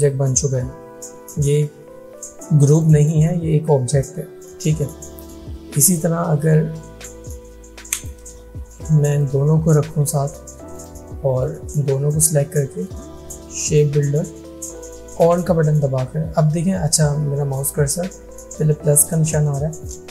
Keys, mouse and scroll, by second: 2.7 click, 5.9 click, 6.8 ctrl+z, 8.0 ctrl+click, 8.8-9.1 alt+scroll up 2, 9.2-10.2 click.